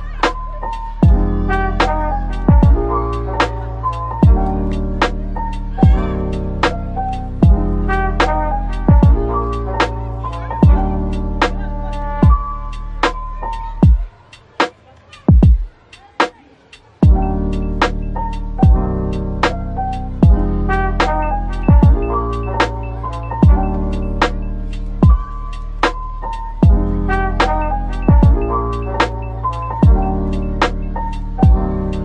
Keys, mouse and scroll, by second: 0.3-1.2 typing, 2.0 double click, 2.3-4.8 typing, 3.4 double click, 4.5 right click, 6.3 typing, 8.0-9.0 typing, 9.3 double click, 10.0-11.5 typing, 11.6 double click, 12.6 typing, 13.4 double click, 13.9-14.8 typing, 15.8-17.3 typing, 17.0 double click, 18.2 double click, 18.6-19.5 typing, 20.2 shift+click, 20.5 shift+double click, 20.7 shift+click, 22.2 ctrl+j, 23.9-26.7 typing, 28.4 typing, 30.6-32.0 typing.